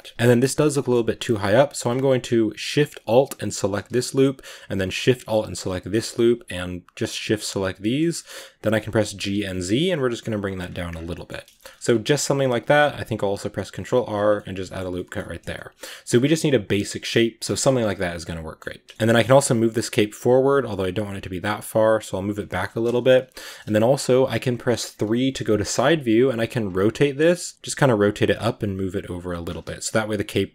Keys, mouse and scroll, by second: 0.1-0.6 scroll up 2, 0.6-3.5 middle drag, 3.5 alt+shift+right click, 3.9-5.3 middle drag, 5.3-7.9 alt+shift+right drag, 7.9 scroll down 2, 8.0 middle click, 8.2-8.9 scroll up 1, 8.9 scroll up 1, 8.9 g, 10.6 Tab, 10.7 scroll down 5, 11.0 middle click, 11.8 Tab, 12.7 ctrl+r, 14.2-14.6 middle drag, 14.6 Tab, 14.8 middle drag, 15.0 scroll down 1, 15.2 a, 15.4-16.6 middle drag, 16.6 right drag, 16.8 Tab, 16.9 scroll up 1, 16.9 middle click, 17.3 Tab, 17.4-18.6 middle drag, 18.6 right click, 18.8 shift+middle drag, 18.9 g, 24.8 KP_3, 26.0-28.2 typing, 29.3 scroll down 2, 29.5 a.